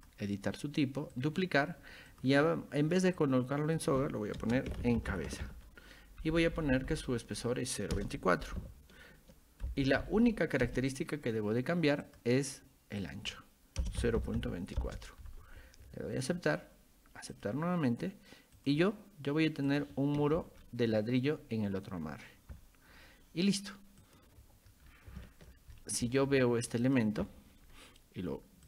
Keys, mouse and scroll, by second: 0.0 click, 1.2 click, 2.1 click, 3.2 click, 4.4-6.0 typing, 6.2 Right, 6.4 Right, 8.0 BackSpace, 8.5 Right, 9.7 Right, 10.7 Return, 12.1 click, 13.0 click, 16.2 click, 17.3 click, 18.6 click, 19.7 click, 20.6 middle click, 22.0 scroll up 2, 24.0 click, 24.8 scroll down 2, 25.2 shift+middle click, 25.8 middle click, 26.8 click.